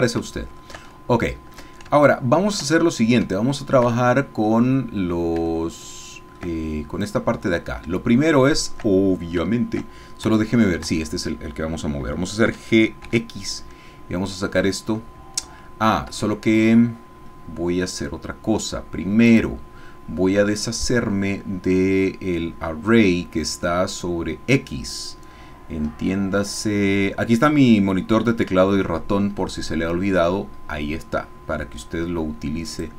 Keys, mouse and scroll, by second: 0.9 ctrl+shift+middle click, 2.0 ctrl+shift+middle click, 3.2 shift+scroll up 2, 3.4 shift+middle click, 3.9-4.9 shift+scroll down 3, 4.9-5.4 scroll down 1, 5.5 shift+middle click, 7.0 click, 8.1 shift+middle click, 9.1 shift+middle click, 10.3 Tab, 12.5 g, 13.0 x, 15.9 Escape, 19.3 click, 23.0-23.5 scroll down 1, 23.5-24.6 scroll down 1, 24.6-26.2 scroll down 1, 26.2 scroll down 1, 29.8-30.7 scroll up 4, 31.4-32.2 scroll up 2, 32.6 click.